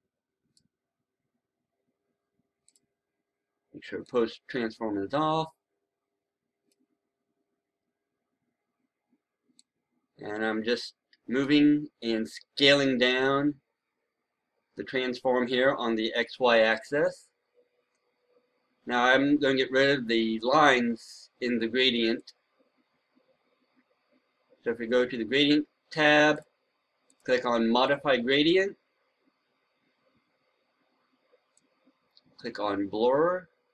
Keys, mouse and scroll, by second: 8.2-9.5 scroll down 1, 9.5-12.3 drag, 12.7-13.5 scroll down 1, 22.1-33.7 drag.